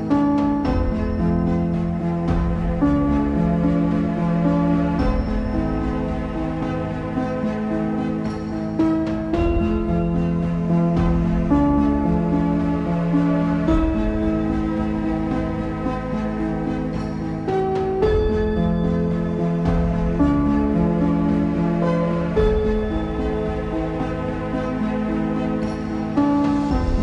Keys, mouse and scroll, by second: 0.6-1.0 scroll up 1, 1.0-1.7 scroll down 4, 1.7-3.0 middle drag, 3.0 scroll down 2, 3.2 middle click, 4.0 scroll up 4, 4.2 middle click, 5.2 click, 6.0 ctrl+a, 8.9 ctrl+a, 9.9 scroll down 1, 10.2 middle click, 11.1 click, 12.4 shift+middle click, 12.8-16.0 scroll up 1, 16.0-19.2 scroll up 1, 21.6 click, 22.4-22.9 scroll up 3, 22.9 click, 25.5 click.